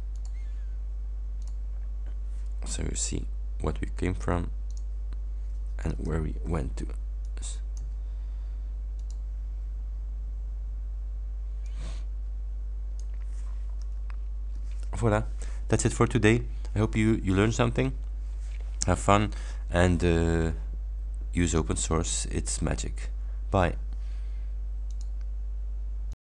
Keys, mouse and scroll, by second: 0.2 click, 1.5 click, 4.7 click, 6.1 alt+Tab, 7.3-8.1 drag, 9.1 click, 11.7-13.3 drag, 14.2 ctrl+scroll up 2, 24.9 click, 26.1 click.